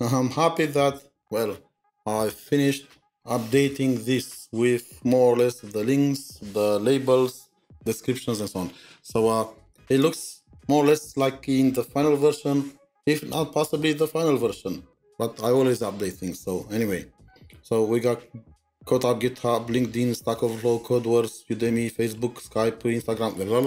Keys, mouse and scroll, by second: 3.0-3.4 scroll down 1, 3.4-5.4 scroll up 7, 16.4 scroll up 7, 16.5-17.1 scroll down 1, 17.1-18.3 scroll down 4, 18.3-19.0 scroll down 2, 19.0-19.7 scroll down 1, 19.7-22.7 scroll down 10, 23.0-23.6 scroll down 1.